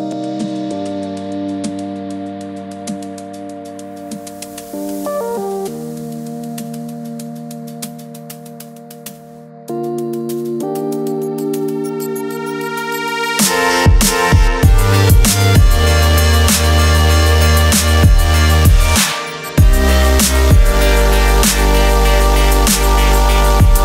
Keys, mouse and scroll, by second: 2.1 click, 4.5 right click, 6.4 click, 7.8 right click, 8.5 click, 14.5 ctrl+z, 15.7 click, 18.1 click, 22.5 click.